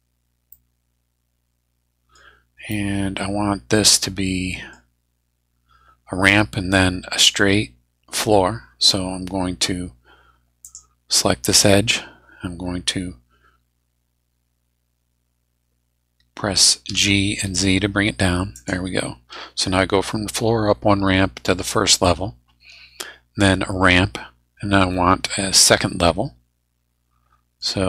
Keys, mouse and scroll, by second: 0.5-2.3 middle drag, 2.5 scroll up 1, 2.7-4.8 middle drag, 4.8 scroll down 1, 10.6 click, 11.5 right click, 16.9 g, 17.4 z, 18.5 click, 25.6-27.8 middle drag.